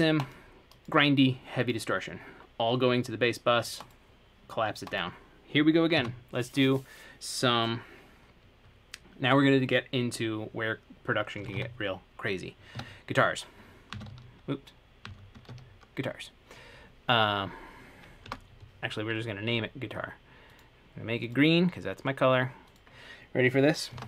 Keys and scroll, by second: 11.3-15.7 typing, 18.5 BackSpace, 23.9-24.0 typing.